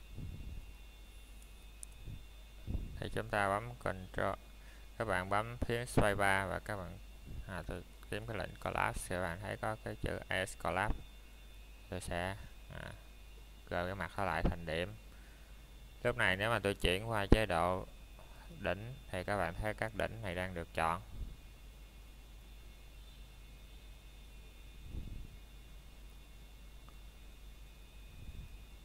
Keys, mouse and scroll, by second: 0.7 shift+middle click, 1.2 scroll up 1, 2.6 b, 5.1 click, 8.9 scroll down 1, 9.4 middle click, 9.7-11.5 scroll up 1, 11.5 z, 12.4 click, 13.0 middle click, 13.4 shift+middle click, 13.7 scroll up 1, 17.8 space, 19.8-20.1 typing, 22.8 typing, 23.7 click.